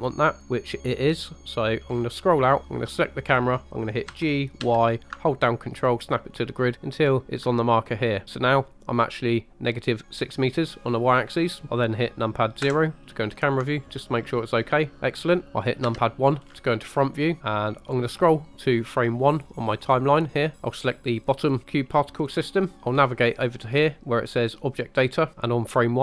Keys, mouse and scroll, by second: 1.9-4.1 scroll down 3, 4.1 g, 4.6 y, 7.2 ctrl+click, 12.6 KP_0, 15.4 middle click, 15.4 scroll down 1, 15.9 KP_1, 16.4-17.2 scroll down 5, 17.4 shift+middle click, 20.6 click, 21.3 click, 22.3-22.7 scroll down 3, 24.7 click.